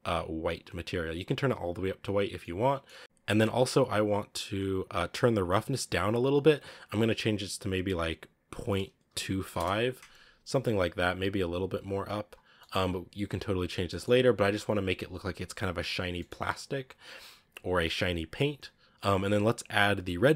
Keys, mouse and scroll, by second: 0.4 click, 2.3-5.4 middle drag, 5.4-9.5 drag, 11.6 click, 12.5 middle click, 12.7 scroll up 2, 13.8 middle drag, 14.0-15.1 scroll up 1, 15.1-15.8 scroll down 1, 15.8 scroll down 2, 16.1 middle click, 17.0 scroll up 5, 17.5-18.4 scroll down 6.